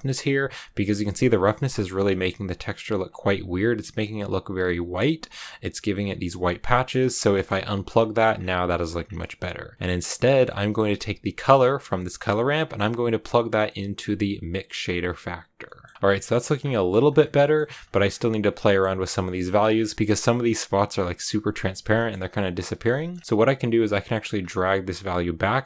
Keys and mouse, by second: 5.9 click, 7.2 shift+click, 7.9 click, 9.1 middle click, 10.5 middle click, 12.5-14.9 drag, 15.5 middle click, 16.0 shift+middle click, 17.8 middle click, 18.2 click, 18.6 middle click, 19.1 shift+middle click, 19.9 shift+click, 21.8 shift+click, 22.9 click, 24.7-25.6 drag.